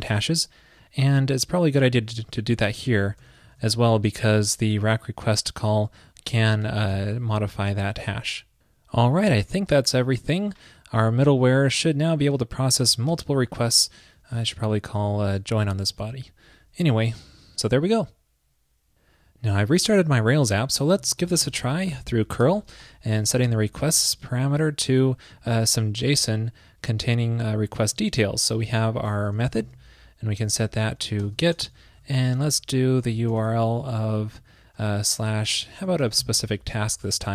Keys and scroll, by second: 7.0 super+s, 15.7 super+Right, 16.0 super+s.